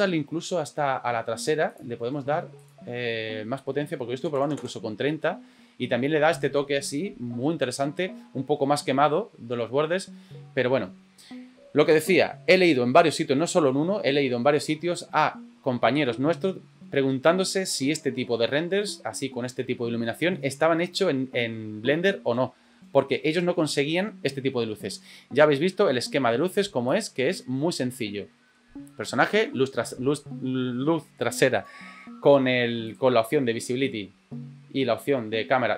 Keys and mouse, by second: 28.3 middle click, 31.5 right click.